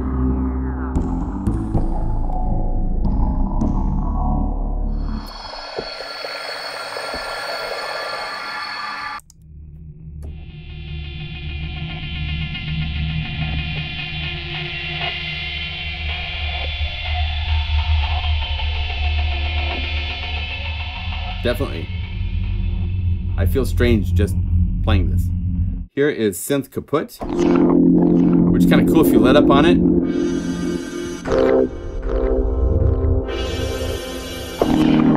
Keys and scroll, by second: 0.9 F2, 10.1 F4, 19.7 F1, 20.0 F2, 27.1 F2.